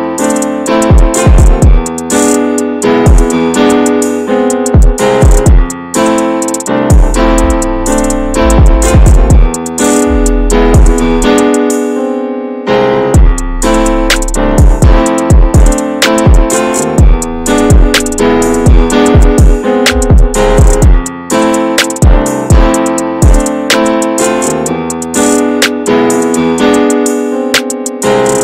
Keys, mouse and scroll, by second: 0.2 shift+d, 0.7 scroll down 1, 0.8 middle click, 1.8 e, 3.4-6.6 shift+middle drag, 6.6 click, 7.3 Tab, 7.3 click, 7.5 scroll down 2, 7.6-8.0 middle drag, 8.0 ctrl+s, 8.0 drag, 8.4-9.1 shift+middle drag, 9.1 ctrl+s, 10.9 Tab, 11.1 middle click, 11.3 Tab, 11.6 middle click, 12.1 alt+shift+click, 12.4 scroll up 2, 12.7-14.9 middle drag, 14.9 click, 15.9 middle click, 16.4 ctrl+b, 17.6 ctrl+z, 17.8 ctrl+z, 18.2 middle click, 18.7 3, 18.8 click, 19.1 shift+click, 19.3 shift+click, 19.6 shift+click, 19.8 shift+click, 20.3 shift+click, 20.5 middle click, 21.0 click, 21.8 middle click, 22.2 2, 22.4 middle click, 22.8 click, 23.0 shift+click, 23.5 alt+shift+click, 23.9 alt+shift+click, 24.2 alt+shift+click, 24.6 alt+shift+click, 25.0 middle click, 25.7 ctrl+b, 27.6 shift+middle click, 28.0 scroll up 2, 28.1 middle click.